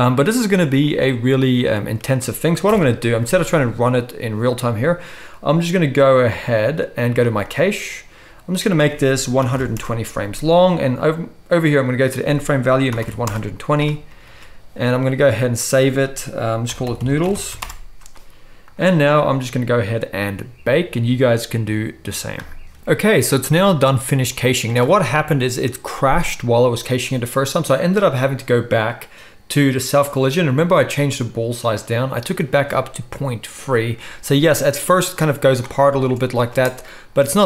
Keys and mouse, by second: 2.7 shift+Left, 13.9 ctrl+click, 14.1 ctrl+s, 14.2-24.0 drag, 22.8 shift+Left, 24.3-37.4 drag, 36.5 space.